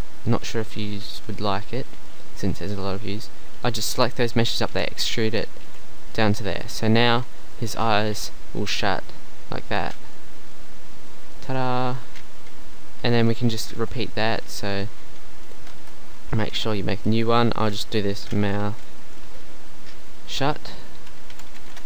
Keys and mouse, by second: 1.2 KP_1, 2.8 e, 3.8 middle click, 4.7 KP_1, 5.7 g, 6.6 Tab, 11.9 middle click, 13.6 click, 13.8 Tab, 15.5 click, 15.8 Tab, 19.1 click.